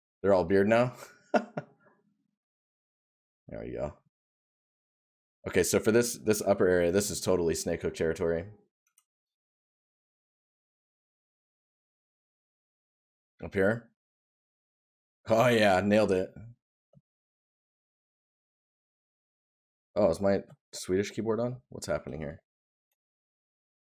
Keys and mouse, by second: 1.2 right click, 3.9 right click, 9.9 right click.